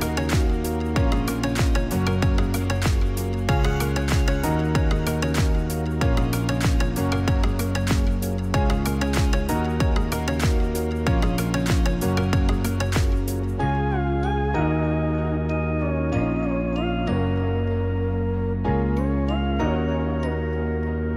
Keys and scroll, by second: 2.8 0, 19.3 0.